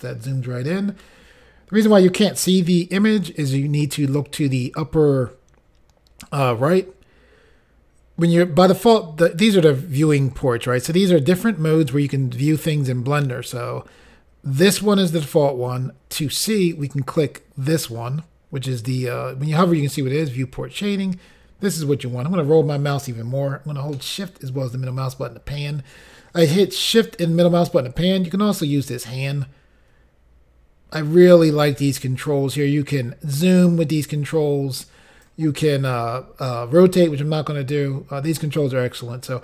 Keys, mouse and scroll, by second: 16.7 click, 22.1-23.3 scroll up 2, 28.9 click, 33.0 click.